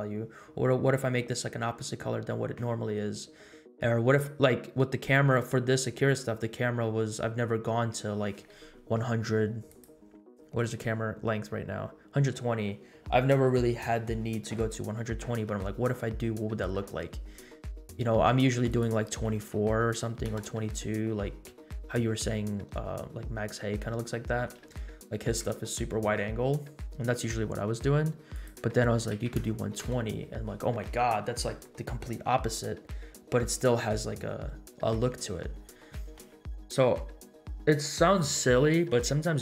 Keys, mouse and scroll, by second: 9.6 click, 10.6-11.1 drag, 18.6-20.6 drag, 22.9-24.3 scroll up 5, 24.3 scroll down 1, 24.7-25.3 shift+middle drag, 25.8 scroll up 2, 26.3-27.0 scroll down 5, 28.3-30.0 drag, 31.6 scroll down 1.